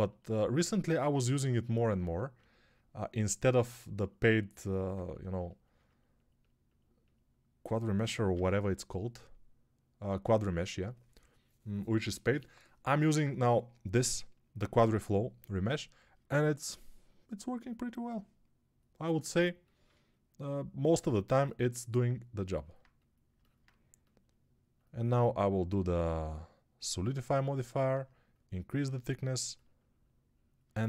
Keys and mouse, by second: 10.9-19.0 middle drag, 10.9 n, 19.0-30.8 shift+drag.